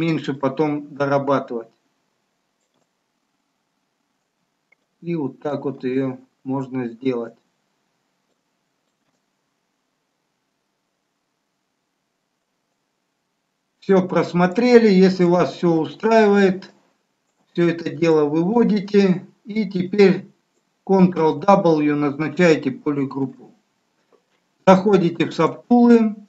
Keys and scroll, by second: 23.0 ctrl+w.